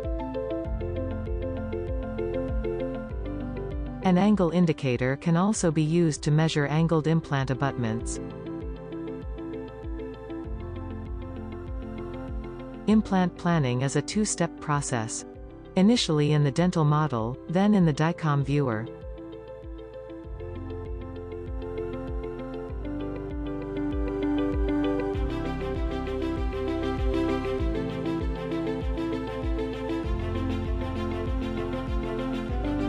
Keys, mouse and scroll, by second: 2.8 r, 3.4-3.9 shift+middle drag, 3.9-4.3 scroll up 1, 4.4 click, 4.6 scroll down 2, 4.6 shift+middle click, 5.5 r, 5.8-8.8 drag, 5.8-8.8 middle drag, 5.8-8.8 right drag, 8.8 scroll up 4, 8.8 click, 8.8 middle click, 8.8 right click, 9.2 g, 10.8 r, 12.8-13.1 scroll up 4, 13.6-14.2 shift+middle drag, 14.2 scroll down 2, 14.8-15.5 middle drag, 15.5 scroll down 5, 16.0-16.8 shift+middle drag, 16.8 g, 19.8-22.4 middle drag, 22.7-24.5 shift+middle drag, 24.5 click, 25.0 scroll down 1, 25.1 middle click, 25.6-26.3 middle drag, 26.3 click, 26.6 middle click, 26.8 scroll down 1, 26.9 shift+middle click, 27.3 r, 28.2 g, 29.4 click, 30.2-31.1 middle drag, 31.1 click, 31.4 middle click.